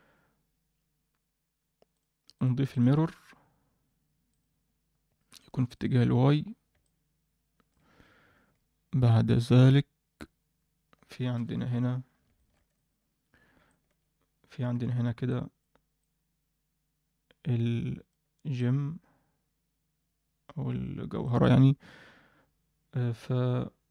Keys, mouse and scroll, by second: 1.9 click, 2.3 click, 2.6-4.4 drag, 5.3 click, 5.7 click, 6.8-7.6 middle drag, 11.3 KP_7, 12.0 scroll up 1, 12.3 shift+middle drag, 12.7 ctrl+middle click, 13.6 alt+shift+middle drag, 14.7-16.0 typing, 15.3 click, 16.0-18.0 drag, 18.0 d, 18.1 d, 18.3 d, 18.5-21.2 drag, 18.5 d, 21.2 d, 21.5 d.